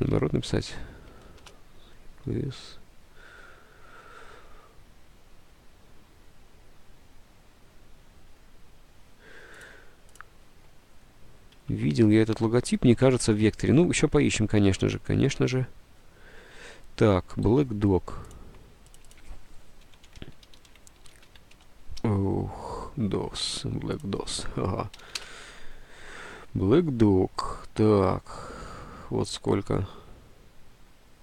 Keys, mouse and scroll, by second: 0.0-1.3 typing, 1.5 Return, 11.7 alt+Tab, 14.9 alt+Tab, 17.6 alt+Tab, 19.7-21.7 typing, 25.0 BackSpace, 25.1 g.